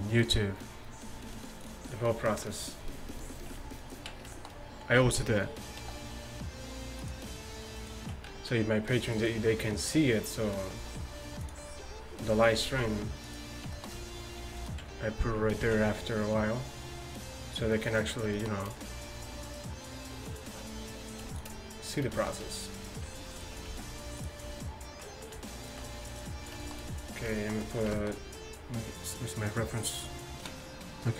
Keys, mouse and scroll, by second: 3.8-5.9 right drag, 5.9 s, 7.8 right click, 8.3-10.8 drag, 8.3 s, 10.8 s, 12.4 right click, 12.5-14.1 drag, 12.7 s, 15.7 ctrl+b, 23.4-26.1 right drag, 23.7 s, 26.1-28.0 drag, 26.4-27.7 right drag.